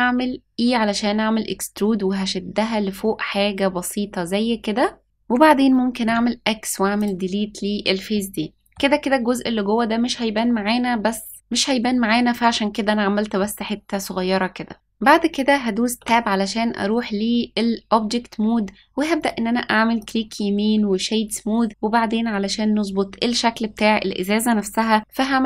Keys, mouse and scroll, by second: 2.5 s, 5.0 middle click, 6.0 x, 8.1 middle click, 13.3-14.7 middle drag, 15.9 Tab, 19.1 right click.